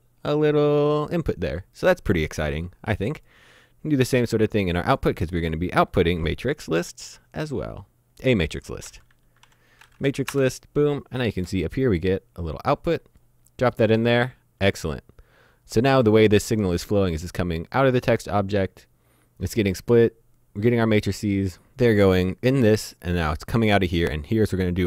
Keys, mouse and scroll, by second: 3.2 click, 4.9 click, 8.9-9.5 typing, 10.1 Down, 10.3 Return, 12.5 click.